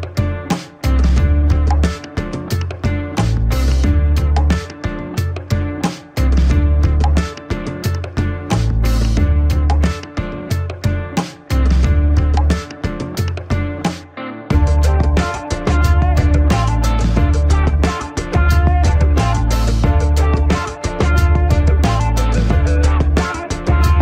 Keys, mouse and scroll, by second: 1.9 click, 2.2 scroll up 1, 2.9 alt+click, 3.7 alt+click, 4.5 alt+click, 5.6 scroll up 1, 6.2-7.5 alt+drag, 7.5 scroll down 1, 8.1 click, 9.1-9.4 scroll down 1, 9.8 typing, 10.2 click, 10.4 scroll down 1, 10.8 ctrl+-, 11.3 scroll up 1, 11.6 ctrl+=, 11.9 click, 12.1 scroll down 1, 12.4 click, 12.8 scroll down 1, 13.3-14.4 alt+drag, 14.4 ctrl+=, 14.6 space, 14.9 alt+click, 15.2 scroll down 1, 15.7-16.9 drag, 16.9 click, 17.1 alt+click, 17.9 scroll down 1, 18.1-18.6 scroll up 2, 18.4 ctrl+-, 19.8 ctrl+-, 21.6 space.